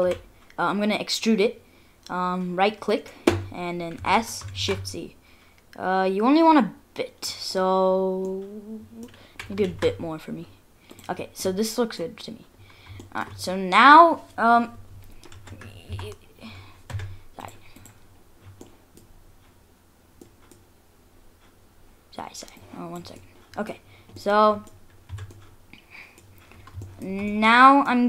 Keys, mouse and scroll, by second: 0.0 scroll down 1, 0.0 e, 4.0 s, 7.5-8.1 scroll up 6, 8.3 middle click, 9.3 s, 11.2-11.5 scroll down 3, 11.5 middle click, 12.0 scroll down 2, 12.6-13.0 scroll up 2, 13.0 shift+middle click, 13.2 shift+scroll down 1, 15.0 scroll down 1.